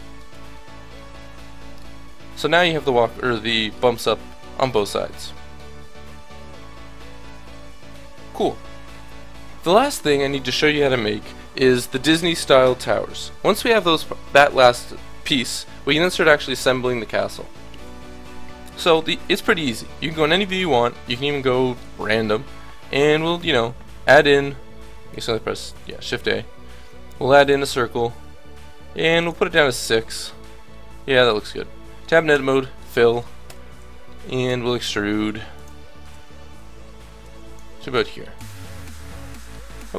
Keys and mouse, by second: 0.3 Tab, 2.5 middle click, 9.4-18.3 middle drag, 17.3 KP_1, 23.2 shift+a, 25.1 a, 25.8 shift+a, 29.7-31.1 middle drag, 31.3 Tab, 32.3 f, 33.5 KP_1, 34.5 e, 37.2-39.7 drag, 38.3 Tab.